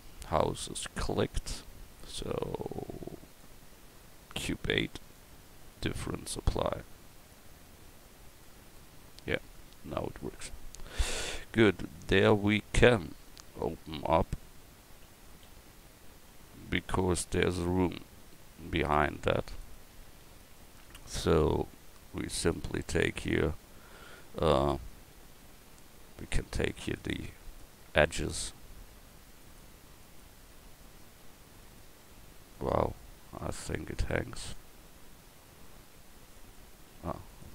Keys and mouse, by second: 7.2-8.5 right drag.